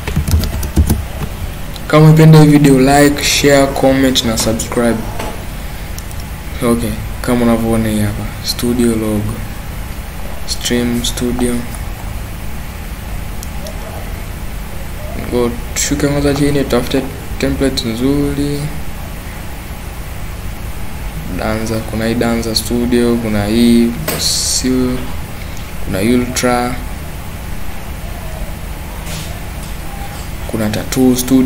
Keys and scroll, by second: 0.0-0.8 typing.